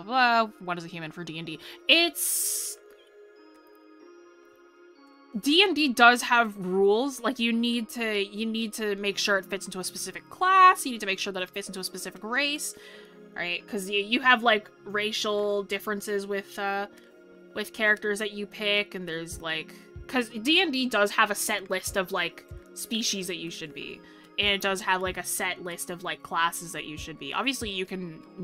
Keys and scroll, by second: 17.4 ctrl+z, 21.3 ctrl+-, 21.7 ctrl+s, 22.3 ctrl+=.